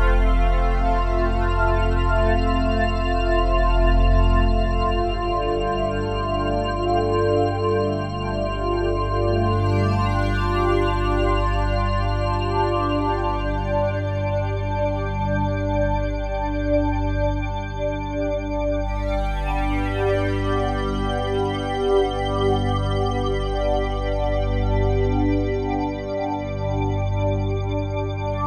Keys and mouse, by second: 0.0 click, 1.2 click, 2.5 click, 4.4 click, 5.6 click, 6.4 click, 7.6 Delete, 8.2 click, 9.4 ctrl+s, 10.5 click, 15.8 click, 17.7 click, 17.9 click, 19.7 click, 20.8 click, 22.1 click, 23.5 click, 25.2 click, 26.0 click.